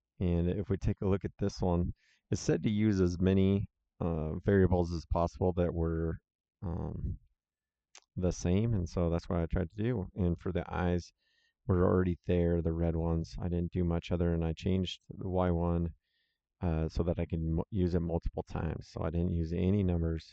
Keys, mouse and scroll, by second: 3.0 click, 14.6 click.